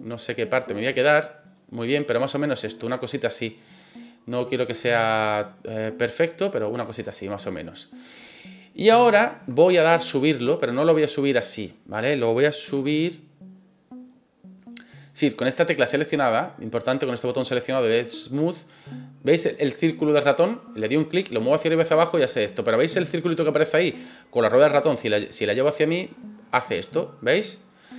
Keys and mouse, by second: 0.6 middle click, 1.4 middle click, 4.0 middle click, 5.2 click, 6.6 right click, 6.9-8.1 middle drag, 9.0 shift+middle click, 10.5-11.9 drag, 12.6 ctrl+z, 14.5 click, 15.0 click, 18.2-27.9 drag.